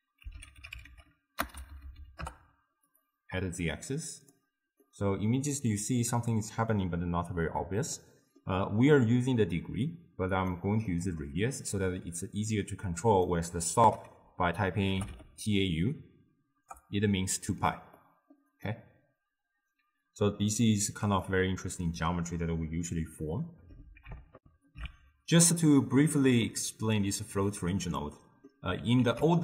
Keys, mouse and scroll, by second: 2.2 Down, 4.4-5.6 drag, 5.6-10.4 middle drag, 10.4 click, 18.7-24.4 middle drag, 24.4 ctrl+alt+shift+q, 28.1-29.1 middle drag, 29.1 ctrl+a.